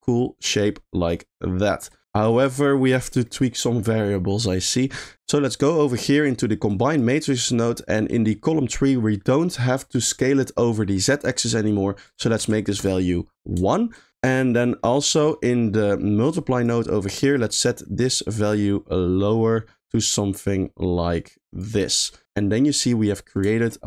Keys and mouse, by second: 2.1 middle click, 2.8 middle click, 3.2 shift+middle click, 5.0 middle click, 5.3 middle click, 5.9 middle click, 6.7 click, 7.2 middle click, 7.8 middle click, 12.1 click, 13.4 middle click, 13.7 shift+middle click, 14.5 middle click, 15.4 middle click, 15.9 middle click, 16.3 click, 16.5 click, 17.5-21.6 shift+drag, 22.1 middle click, 23.0 middle click, 23.6 shift+middle click.